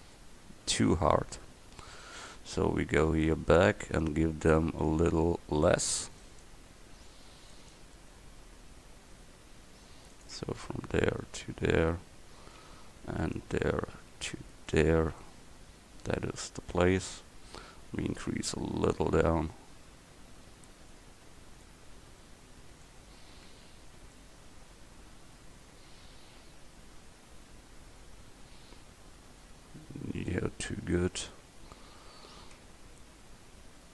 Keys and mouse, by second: 3.1 Tab, 4.9 a, 15.3-16.5 middle drag, 23.1 Tab, 23.6 Tab, 32.7 Tab.